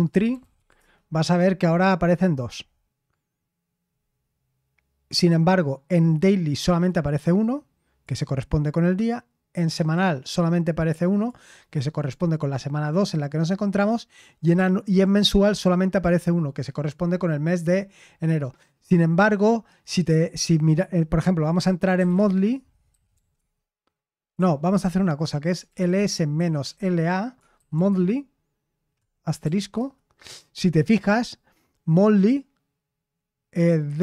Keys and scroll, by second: 0.0-1.0 typing, 21.7-28.2 typing, 29.4 shift+8, 29.7 Return.